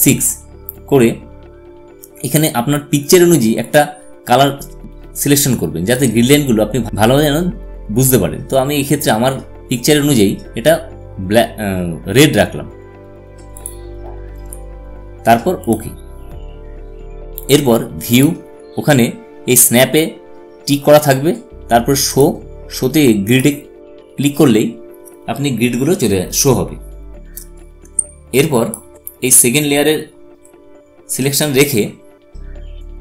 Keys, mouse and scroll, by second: 0.8-3.8 drag, 4.5 click, 4.6-7.8 drag, 14.5 click, 19.0 click, 23.1 click, 28.9 space, 29.3 click, 29.5 space.